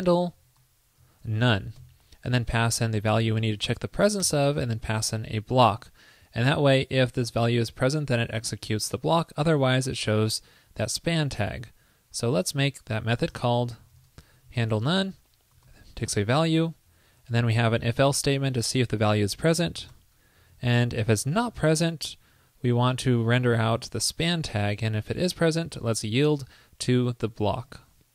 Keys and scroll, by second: 2.5 alt+Right, 2.6 alt+Right, 3.5 shift+super+Right, 21.0 shift+super+l, 21.7 super+v, 27.8 super+s.